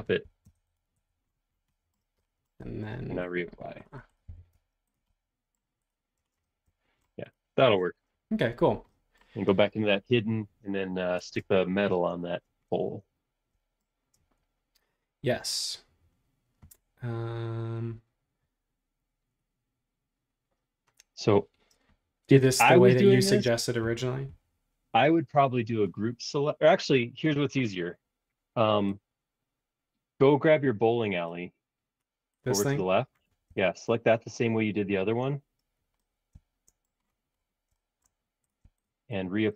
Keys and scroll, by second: 0.4 Return, 0.9 ⟲, 4.2 b, 6.2 space, 7.6 space, 11.7 shift+g.